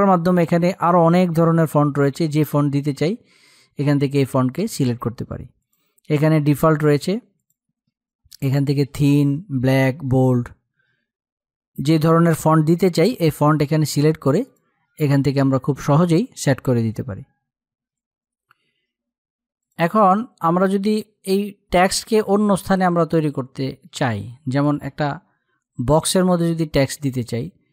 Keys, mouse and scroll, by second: 2.1-5.1 drag, 14.0 click, 21.6-23.9 drag.